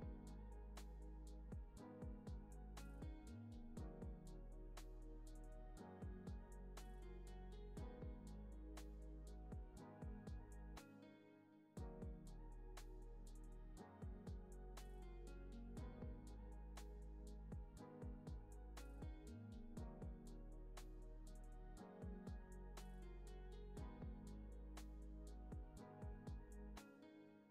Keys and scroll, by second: 3.3 alt+x, 7.4 super+z, 12.7 super+z, 14.0 super+c, 14.2 super+v, 14.6 super+c, 14.8 super+v, 22.8 z, 26.7 x, 27.3 z.